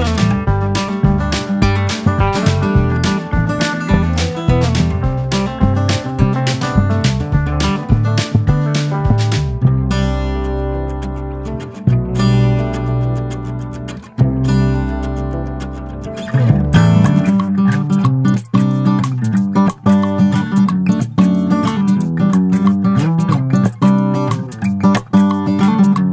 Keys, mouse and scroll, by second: 0.9 click, 2.1 middle click, 2.3 ctrl+s, 5.1 click, 5.5-6.1 scroll down 13, 6.1-8.6 shift+middle drag, 9.2 click, 9.5 ctrl+s, 10.4 click, 10.8-11.9 drag, 14.2 click, 14.8-15.3 scroll down 4, 15.3 click, 16.1 click, 16.5-16.8 scroll up 3, 16.8 drag, 17.3-18.0 scroll down 4, 18.0-18.8 drag, 18.8-19.2 scroll down 1, 19.2 drag, 19.4 scroll up 1, 19.7-20.4 drag, 20.4-21.0 scroll down 3, 21.0 click, 21.3-21.8 scroll down 12, 21.8 scroll up 3, 22.2 click, 23.7 n, 24.2 click, 24.7 click, 25.5 click.